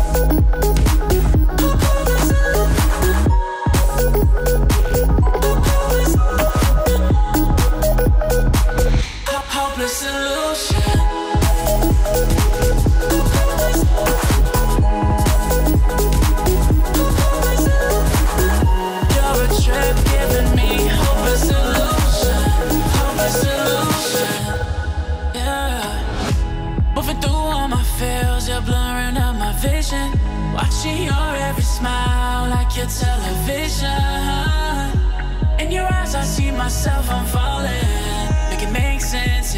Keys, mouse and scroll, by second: 5.2 click, 7.5 click, 9.5-13.8 drag, 14.1 alt+scroll down 1, 14.7 alt+scroll up 1, 15.1-15.9 click, 18.0 alt+scroll down 1, 19.5-20.4 click, 20.6 alt+scroll up 1, 21.8 alt+scroll up 1, 22.0 ctrl+shift+], 23.4 click, 23.4-25.4 drag, 25.5 click, 26.3 click, 27.4-27.7 scroll down 1, 27.7 scroll up 1, 28.0-28.6 scroll down 1, 28.9 scroll up 1, 30.7 click, 31.7 click, 32.5-33.0 click, 33.7 alt+scroll down 1, 33.9 alt+scroll up 1, 34.3 click, 34.7 alt+scroll up 1, 34.9 shift+click, 35.2 alt+scroll down 1, 35.5 click, 35.8 shift+click, 36.8 shift+click, 37.4 alt+scroll down 1, 37.6 alt+scroll up 1, 38.4 shift+click, 38.6 alt+scroll down 2.